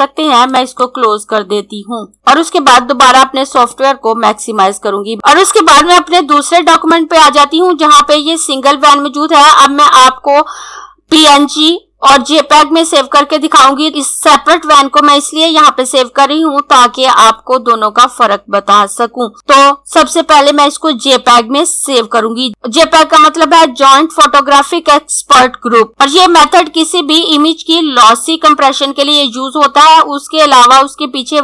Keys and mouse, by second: 0.3 click, 6.7 click.